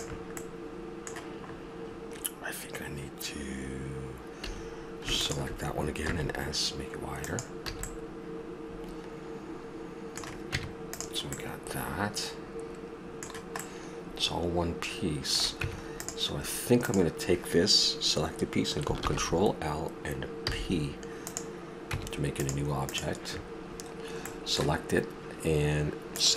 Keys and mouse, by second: 0.4-4.5 middle drag, 4.5 a, 6.0 s, 6.1-7.1 drag, 7.7 a, 7.8 click, 8.0-9.6 middle drag, 10.5 Tab, 11.3 middle drag, 12.4-14.1 middle drag, 14.1-14.8 middle drag, 15.2 middle click, 15.5 Tab, 19.0 ctrl+l, 20.5 p, 21.9 Tab, 22.8-24.2 drag.